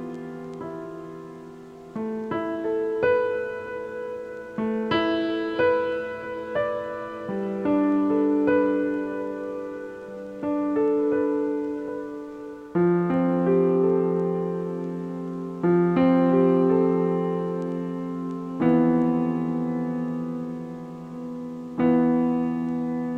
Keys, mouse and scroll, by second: 0.0-4.8 middle drag, 4.8-6.5 typing, 7.6-8.2 scroll down 2, 8.2 KP_7, 8.8 scroll up 4, 9.0 g, 14.2-18.6 middle drag, 18.6 a, 18.8 a, 19.8 shift+middle click, 20.5-21.2 scroll up 1, 21.2-23.1 middle drag.